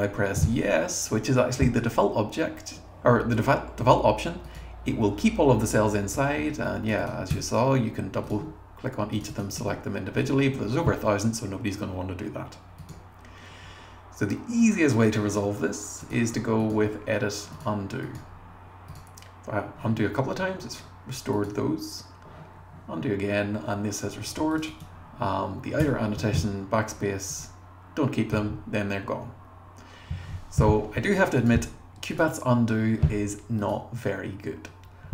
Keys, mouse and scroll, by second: 4.4 click, 6.6 click, 7.0 click, 7.3 BackSpace, 8.3 click, 9.1 click, 9.3 click, 9.6 BackSpace, 10.2 click, 12.8 click, 24.5 click, 24.7 click, 25.8 BackSpace, 27.3 click, 33.6 click.